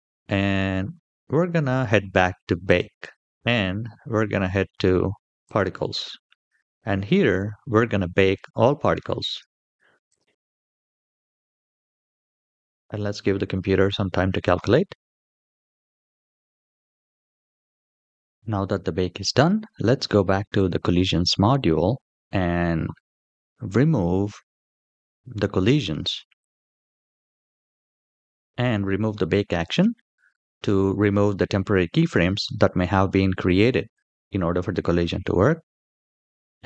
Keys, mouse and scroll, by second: 0.6-2.4 scroll up 2, 2.4 click, 5.2 click, 9.8-18.2 drag, 20.4 click, 21.7-23.3 scroll down 1, 23.3-24.8 scroll down 1, 26.1 click.